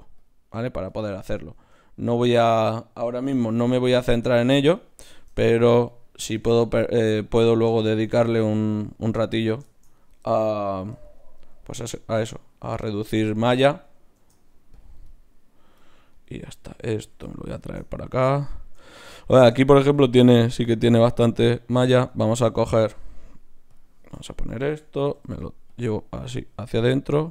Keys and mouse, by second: 1.5 ctrl+Tab, 2.6 click, 3.4 f, 3.6 f, 4.6 f, 11.5 d, 11.6-14.1 drag, 14.1 shift+q, 16.1-24.0 right drag, 23.7-25.4 drag, 24.2-26.3 middle drag, 24.2-25.4 right drag, 25.1 g, 26.3-27.3 right drag.